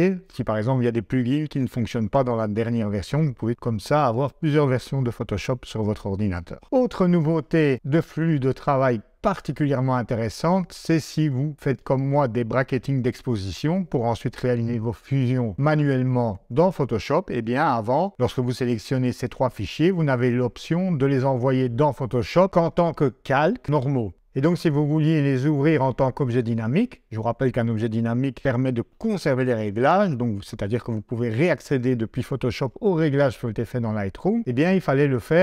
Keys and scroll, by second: 6.6 g, 13.3 Right, 15.8 Left.